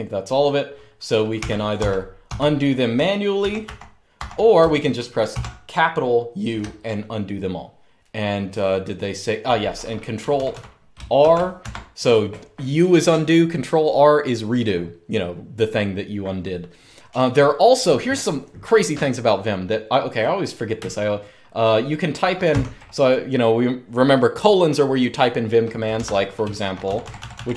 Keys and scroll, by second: 1.5-1.9 typing, 3.1 ctrl+r, 3.3 ctrl+r, 3.9 ctrl+r, 5.0 shift+u, 9.9-10.9 typing, 11.4 Escape, 22.2 :, 25.7 Escape, 26.1-27.5 typing.